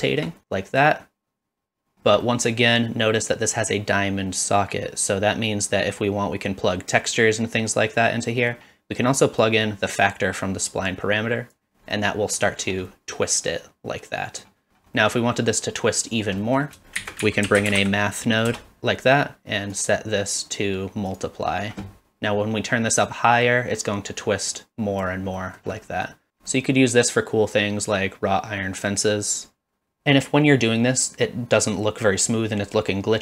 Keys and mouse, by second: 0.0 shift+middle click, 0.4-1.9 drag, 2.4 middle click, 8.4 middle click, 9.4-11.5 drag, 12.0-12.4 middle drag, 12.9-14.4 middle drag, 15.0 middle click, 16.4 middle click, 17.0 shift+a, 19.7-21.2 drag, 23.2-25.0 drag, 25.4 middle click, 26.0 middle click, 26.5 middle click, 28.0-29.3 drag.